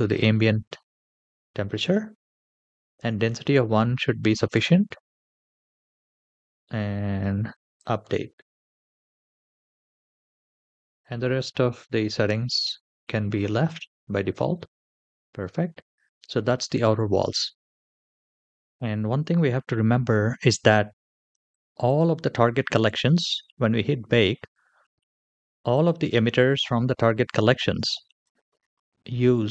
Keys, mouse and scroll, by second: 2.1-5.2 scroll down 1, 7.4 click, 14.5-16.3 scroll up 7, 23.6 drag, 27.1 click.